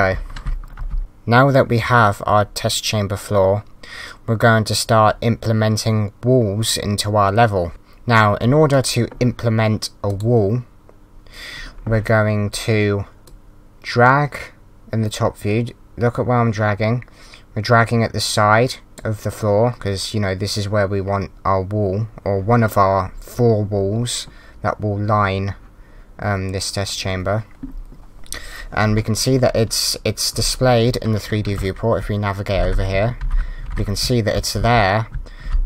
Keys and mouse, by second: 0.2-0.9 typing, 7.7 click, 8.7 click, 10.1 click, 13.3 click, 31.5 d, 32.0 w, 32.5 Up, 32.5 Left, 32.9 w.